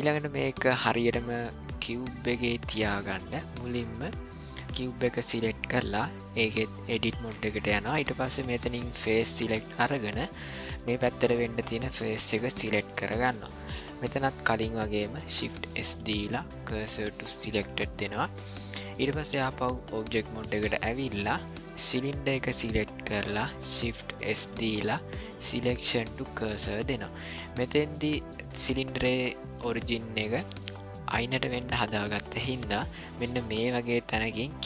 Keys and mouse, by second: 0.4 ctrl+middle click, 4.5 click, 6.6-7.2 drag, 9.0 click, 11.9 click, 15.7 shift+s, 19.5 click, 21.9 click, 24.2 shift+s, 27.4-29.5 middle drag, 30.0-30.3 shift+middle drag, 32.7 middle click.